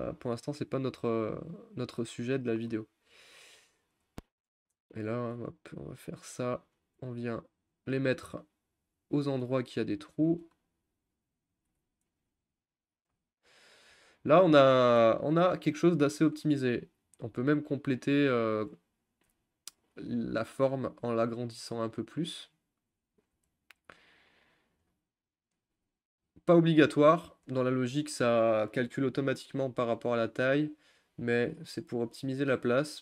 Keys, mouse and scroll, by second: 0.8 click, 2.2-4.7 scroll up 1, 4.7 click, 5.3 g, 6.7 click, 6.9 g, 8.3 g, 9.3 click, 9.4 g, 10.4 r, 11.7 g, 17.3 r, 18.6 g, 19.3 s, 20.8 click, 21.0 s, 23.4 g, 25.5 click, 25.7 s, 27.5 g, 29.4 click, 29.7 s, 32.0 g, 32.6 s.